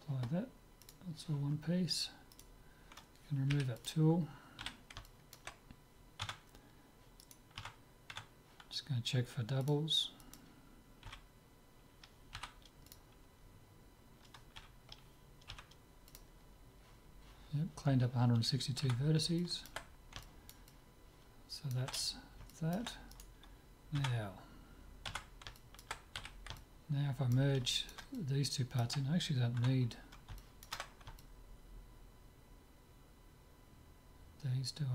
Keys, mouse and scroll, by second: 0.9-2.6 drag, 2.4-4.2 right drag, 3.5 Delete, 4.7 z, 5.1-7.1 middle drag, 6.3 Tab, 7.3-9.2 right drag, 7.6 Tab, 9.7-12.2 drag, 11.1 a, 12.4 w, 14.6 a, 15.5 w, 18.9 Tab, 19.4-23.2 middle drag, 23.2-24.4 drag, 23.2-25.3 right drag, 24.0 Tab, 25.3 Tab, 25.6-29.6 middle drag, 26.3 z, 29.6 Tab, 29.9-33.2 middle drag.